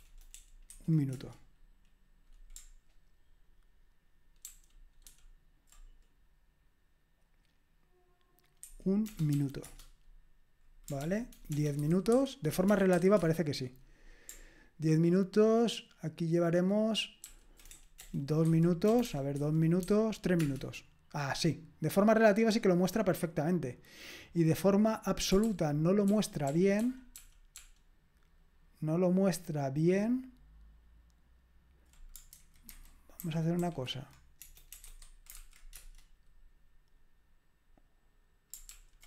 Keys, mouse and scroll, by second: 0.7 1, 1.1 Return, 4.5 ctrl+o, 5.1 ctrl+p, 9.3 m, 9.6 Return, 11.0 ctrl+p, 11.5 BackSpace, 11.8 0, 12.1 ,, 12.9 m, 13.2 Return, 17.2 ctrl+p, 17.8-20.4 typing, 25.4 ctrl+p, 26.1 ctrl+p, 26.5 ctrl+p, 26.8 ctrl+p, 32.3 alt+b, 32.7 alt+b, 33.2 alt+b, 33.6 alt+f, 34.4-36.0 typing, 38.7 ctrl+p.